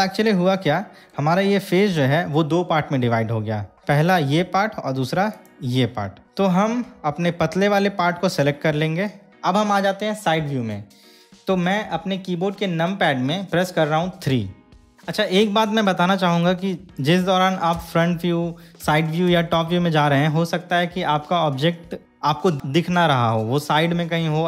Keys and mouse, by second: 0.9 middle click, 3.8 click, 3.8 3, 5.5 click, 6.4-9.3 middle drag, 14.4 KP_3, 17.9 KP_1, 19.0 KP_3, 19.5 KP_7.